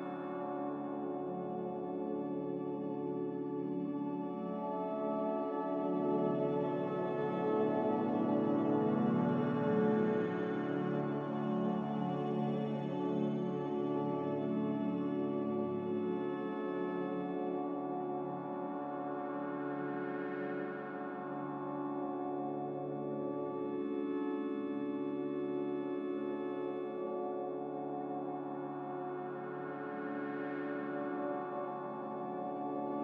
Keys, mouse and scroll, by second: 0.1 click, 1.3 z, 4.8-5.6 typing, 5.7 Return, 9.4-11.2 typing, 12.9 b, 14.0 Delete, 15.1 m, 21.3 b, 23.2 Delete, 24.2 m.